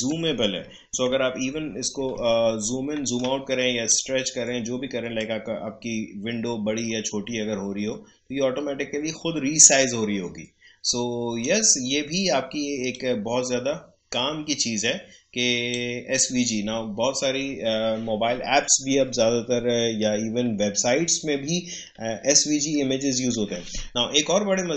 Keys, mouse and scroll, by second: 1.1 alt+=, 3.0 right click, 3.9-18.0 drag.